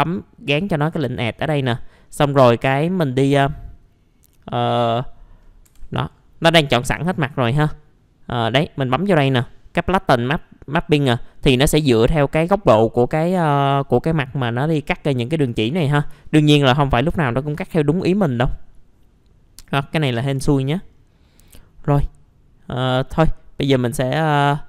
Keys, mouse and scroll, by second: 2.1 middle click, 5.6 F2, 10.1 click, 12.0 middle click, 14.8-15.5 scroll up 1, 15.5 middle click, 15.7-16.1 scroll down 1, 16.2 alt+middle click, 16.8 scroll up 1, 17.1 middle click, 17.5-19.3 scroll up 1, 20.9-21.2 scroll down 1, 21.2 middle click, 23.5 scroll up 1.